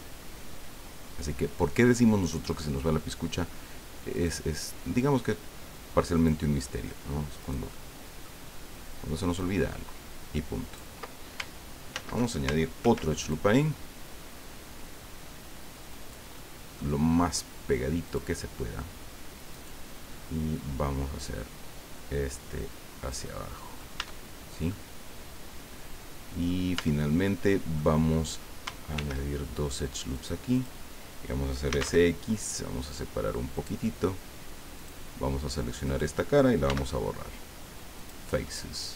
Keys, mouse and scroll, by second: 2.2 click, 2.5 middle click, 4.1 right click, 6.1 click, 7.4 right click, 7.7 middle click, 9.4-10.9 drag, 11.9 ctrl+z, 12.8 ctrl+r, 13.2 ctrl+click, 15.9 click, 18.0 click, 19.5 right click, 20.0-20.3 scroll up 1, 21.1-23.9 drag, 23.3 right click, 24.0 Tab, 24.3 scroll down 1, 24.7-26.6 drag, 26.7 Tab, 27.3 click, 28.0-28.3 scroll up 2, 28.9 ctrl+r, 29.6 scroll up 2, 30.1 click, 30.5 click, 31.7 s, 31.8 x, 33.5 click, 34.8 click, 35.8 right click, 36.7 x, 38.0 click, 38.4-38.9 drag.